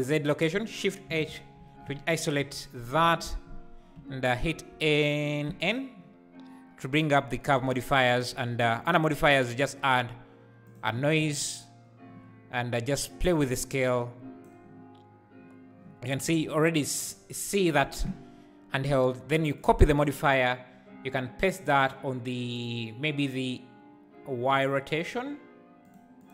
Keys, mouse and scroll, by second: 1.0 shift+h, 3.9 m, 8.2-11.2 drag, 11.2 space, 13.2-16.2 drag, 19.6-21.6 drag, 25.8 click, 26.2 click.